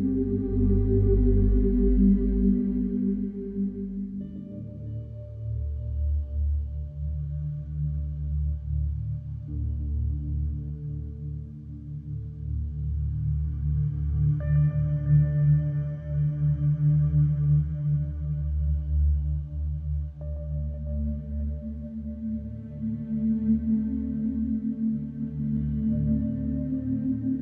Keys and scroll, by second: 6.2 n, 6.3 Return, 7.3 4, 10.2 3, 11.4 4, 11.9 3, 12.9 4, 14.8 3, 19.7 g, 19.8 Return, 22.5 4, 25.7 Return.